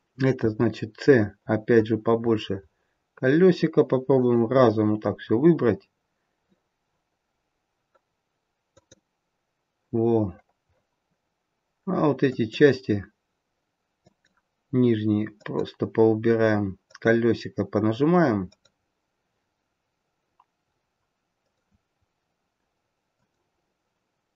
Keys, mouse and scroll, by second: 0.3 c.